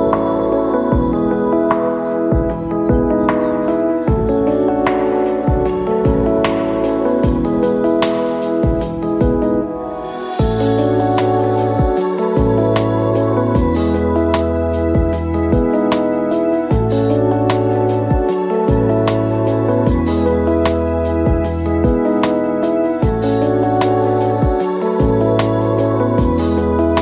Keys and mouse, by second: 0.0 ctrl+a, 0.1 right click, 0.4-1.8 typing, 1.2 click, 1.8 click, 2.0 click, 2.9 click, 3.9-5.7 typing, 4.0 right click, 4.6 middle click, 4.8 middle click, 5.3 ctrl+3, 6.0 click, 7.4 x, 7.7 shift+a, 7.8 Tab, 8.2 right click, 8.7 middle click, 9.0 click, 9.0 g, 9.0 y, 9.4 KP_1, 9.7 g, 10.1 click, 10.5 click, 10.7 Tab, 11.0 Tab, 11.0 ctrl+j, 11.1 click, 11.2 p, 11.3 Tab, 11.5 Tab, 11.6 shift+click, 11.8 e, 12.1 shift+click, 12.2 e, 12.7 ctrl+z, 13.3-17.3 typing, 13.8 click, 14.5 middle click, 15.1 click, 15.5 middle click, 15.7 click, 16.4 shift+middle click, 16.9 shift+middle click, 17.1 middle click, 17.3 click, 17.5 middle click, 18.6 click, 18.9-20.8 typing, 19.0 click, 19.5 shift+click, 20.0 click, 20.1 middle click, 20.6 right click, 21.0 ctrl+z, 21.1 ctrl+z, 21.7 shift+click, 21.9 ctrl+z, 22.2 middle click, 22.6 middle click, 22.7-24.8 typing, 22.9 right click, 23.1 ctrl+z, 23.3 shift+click, 23.5 click, 23.9 click, 24.0 middle click, 24.3 right click, 24.3 ctrl+z, 24.8 Tab, 24.8 right click, 24.9 Tab, 24.9 middle click, 25.1 Tab, 25.2 shift+click, 25.6 middle click, 25.7 middle click, 25.9 Tab, 26.3 middle click, 26.6 shift+e, 26.9 shift+f.